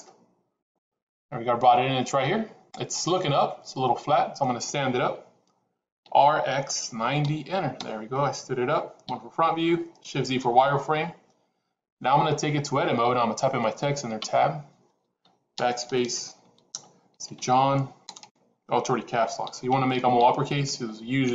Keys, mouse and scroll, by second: 2.8-4.3 middle drag, 5.9 r, 8.9 KP_1, 10.4 shift+z, 14.1 Tab, 15.5 BackSpace, 15.6 BackSpace, 16.7-18.1 typing, 19.3 j, 19.6 o, 19.9 h, 20.1 n.